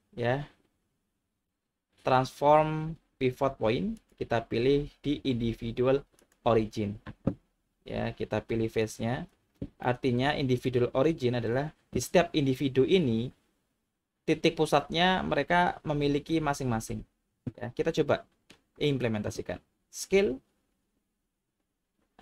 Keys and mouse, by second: 4.0-6.3 drag, 8.8 click, 10.0 middle click, 18.1 middle click, 20.1 s.